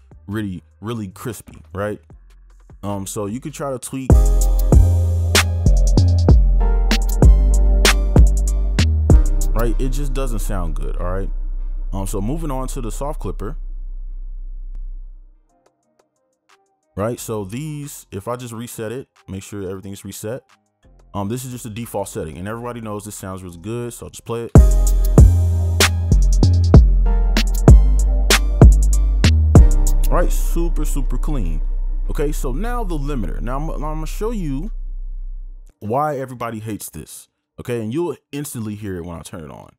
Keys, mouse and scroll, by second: 4.0 space, 9.5 space, 16.3 double click, 17.8 right click, 19.6 right click, 19.8 right click, 24.7 space, 29.9 space, 35.9 double click.